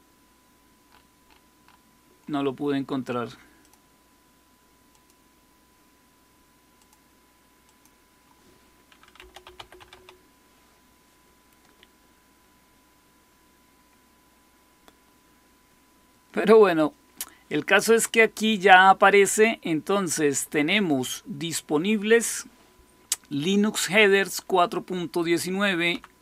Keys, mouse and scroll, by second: 3.5 click, 4.8 click, 6.6 click, 7.5 click, 8.8-10.3 typing, 12.7 scroll down 1, 20.6 click, 25.8 Down.